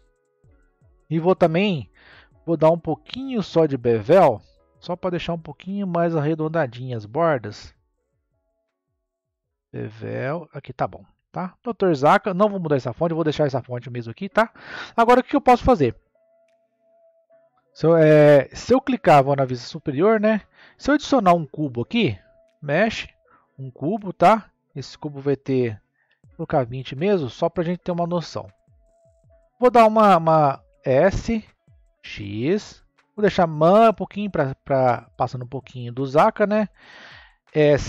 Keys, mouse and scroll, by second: 0.8-1.9 scroll down 2, 1.9-4.1 scroll down 4, 4.1-5.5 drag, 5.5-6.3 scroll up 1, 6.3-8.6 middle drag, 8.6-11.5 drag, 11.5-12.1 middle drag, 12.1-12.7 scroll down 2, 12.7-17.0 middle drag, 17.0 Tab, 19.1 KP_7, 20.0 scroll down 2, 21.0 shift+a, 24.4-27.4 drag, 28.8 click, 30.6 s, 37.4 s.